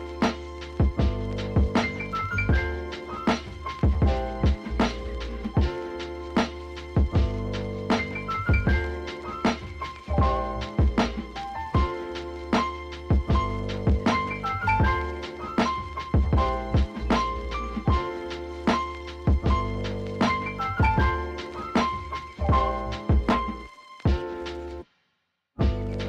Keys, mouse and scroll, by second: 0.2 s, 1.0 g, 1.8 Tab, 2.1 g, 3.2-7.1 typing, 4.9 Tab, 5.8 Tab, 6.8 Tab, 8.2 click, 8.7 Tab, 9.0 Tab, 9.2 g, 10.0-10.4 scroll up 1, 10.4 Tab, 10.8 3, 10.9 click, 11.3 click, 12.0 s, 13.3 e, 14.4 Tab, 14.9 Tab, 15.3 2, 15.5-15.9 middle drag, 15.9 scroll up 2, 16.2-16.7 shift+middle drag, 16.7 click, 16.9 click, 17.6 KP_0, 18.1 g, 19.0 Tab, 19.6-22.2 drag, 22.2 ctrl+2, 22.6 ctrl+z, 22.9 click, 23.1 scroll down 2, 23.2 click, 23.4-24.1 right drag, 24.1 scroll up 1, 24.3 Tab, 24.6 g, 25.7 Tab, 26.0 click.